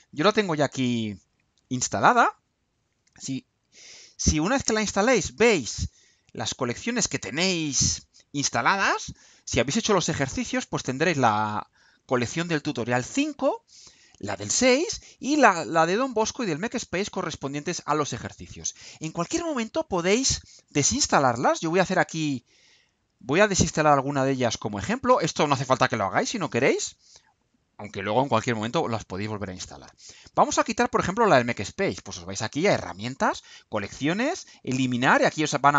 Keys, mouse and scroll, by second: 0.1 click.